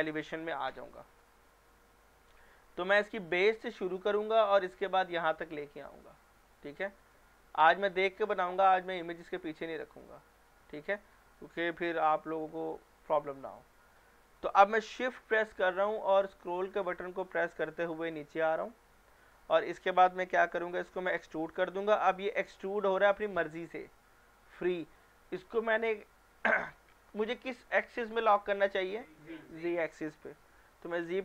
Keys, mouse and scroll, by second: 0.9 scroll down 1, 2.5-3.4 scroll up 1, 3.4-5.3 scroll down 1, 5.9-6.4 scroll down 1, 6.4-7.1 scroll up 1, 7.1-7.5 scroll down 1, 7.6 middle click, 8.3-9.8 scroll up 1, 10.0-11.3 shift+middle drag, 13.5-15.1 scroll down 2, 16.8-18.7 shift+middle drag, 19.1 scroll up 1, 19.5-21.2 scroll down 1, 21.2 e, 31.0 z.